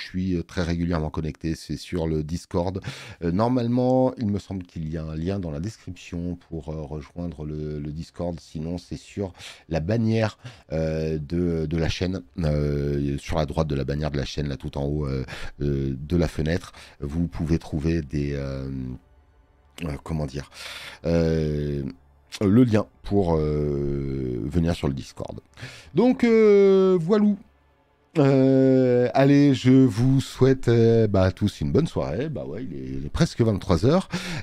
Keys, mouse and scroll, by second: 8.5 click.